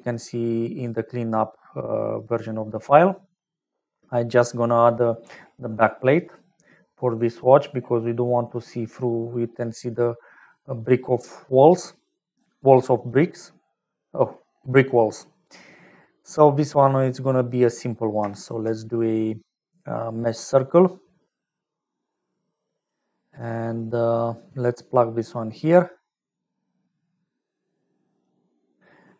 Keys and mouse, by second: 1.5 click, 11.2 click, 12.0 click, 12.2 click, 12.9 click, 13.7 click, 15.1 click, 18.4 shift+a, 24.0 middle click, 26.6-28.3 drag.